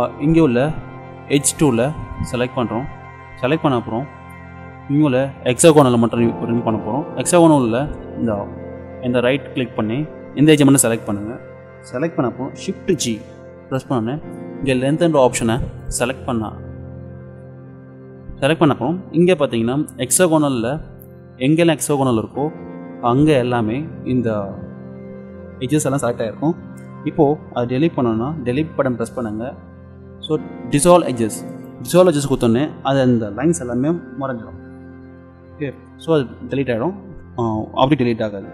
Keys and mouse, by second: 2.2-4.1 drag, 7.6-9.3 drag, 12.9 shift+g, 28.9 Delete.